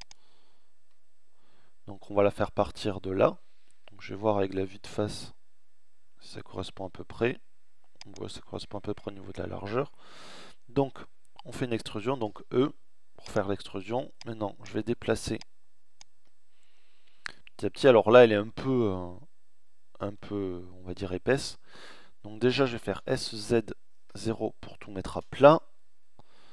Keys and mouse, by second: 2.8 KP_1, 5.6 e, 9.0 ctrl+z, 11.3 e, 13.2-14.3 drag, 15.2-16.2 middle drag, 16.2 middle click, 21.9 s.